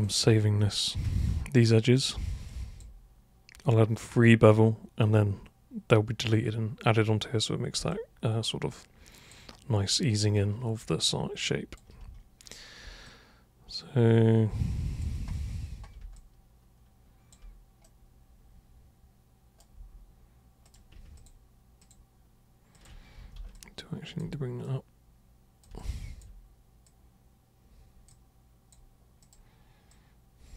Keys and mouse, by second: 1.0-1.9 alt+super+drag, 2.5 alt+super+click, 7.9-9.3 alt+super+drag, 9.8-11.7 alt+super+drag, 13.1-15.0 alt+super+drag, 16.1-17.3 alt+super+drag, 17.8-19.6 super+right drag, 20.6 super+click, 21.1 ctrl+shift+super+click, 21.8 ctrl+shift+super+click, 22.8 ctrl+shift+super+click, 23.2 super+w, 23.5-24.2 alt+super+drag, 24.6-25.6 super+drag, 25.8-26.2 alt+super+drag, 26.8 super+click, 28.1 super+click, 29.2 super+click, 29.8 super+click.